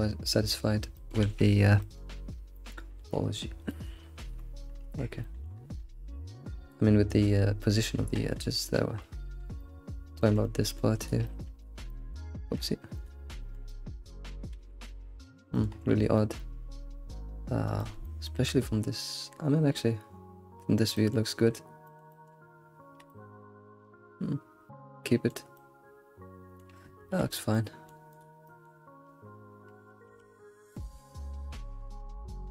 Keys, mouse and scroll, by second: 0.2-1.2 middle drag, 1.2 alt+shift+z, 1.9-2.2 middle drag, 2.2 scroll up 3, 2.8 alt+shift+z, 4.5 alt+q, 4.5 scroll up 1, 6.2-8.2 shift+middle drag, 6.5 Tab, 8.2 Tab, 8.6-10.2 scroll down 5, 8.9 Tab, 10.2-12.5 shift+middle drag, 12.5 alt+q, 13.0 click, 13.4 alt+q, 13.7-14.6 middle drag, 14.6 alt+z, 14.9-15.7 middle drag, 15.9-16.2 scroll up 4, 16.2-17.9 middle drag, 18.1 alt+middle drag, 21.0 alt+middle drag, 21.9 alt+middle click, 22.1 alt+middle click, 23.1-27.0 middle drag, 27.1 alt+q, 27.6-28.1 middle drag, 28.1 click, 28.5-30.1 middle drag, 30.1 Tab, 30.7 click, 31.0 alt+s.